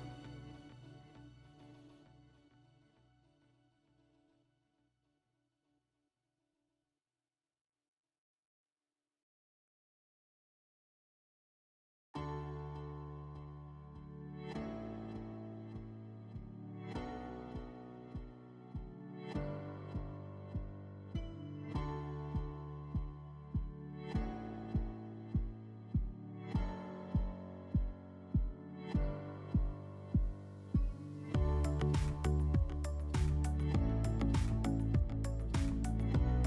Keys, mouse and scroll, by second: 0.5 click, 2.0 click, 3.1 click, 4.4 click, 5.0-6.2 drag, 7.1 click, 9.6 click, 11.3 click, 13.4 click, 14.9 click, 16.6 click, 17.3 click, 18.1 click, 19.1 click, 20.5 click, 20.7 click, 21.4 typing, 22.7 click, 24.0 click, 26.4 click, 27.9 click, 28.7 click, 31.0 alt+middle click, 32.5 click, 34.6 click, 35.9 ctrl+z.